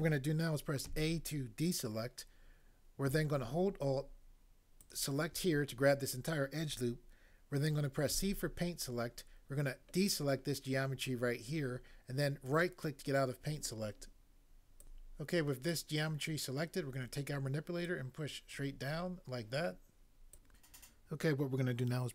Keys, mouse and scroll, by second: 0.8 a, 4.8 alt+click, 4.9 alt+click, 8.2 c, 10.2 middle click, 12.6 right click, 14.9 click, 20.3 click.